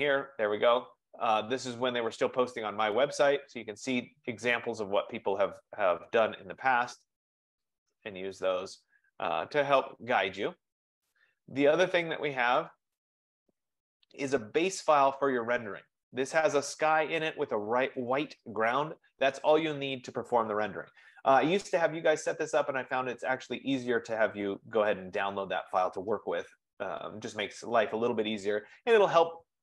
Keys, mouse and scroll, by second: 0.2-0.6 scroll down 10, 0.7-3.2 scroll down 21, 3.4 scroll, 5.8-6.8 scroll, 7.4-8.4 scroll, 8.8-9.6 scroll, 11.0 click, 13.0 click, 16.6-17.7 drag.